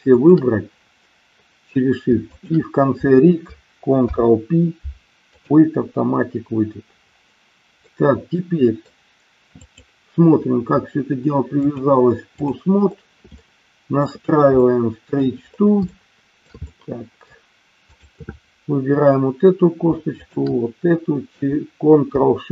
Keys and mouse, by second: 0.0 shift+click, 2.2 shift+click, 3.9 ctrl+p, 7.7-8.9 middle drag, 9.5 click, 11.6-12.5 drag, 13.4 shift+middle click, 14.6 middle click, 15.9 shift+middle click, 16.6 middle click, 17.7 click, 20.1 shift+click.